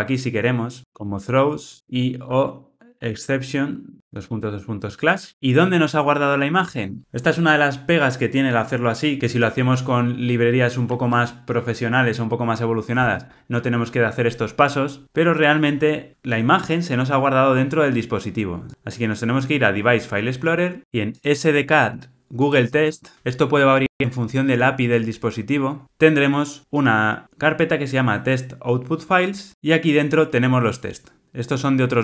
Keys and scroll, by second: 0.8 super+z, 3.9 Return.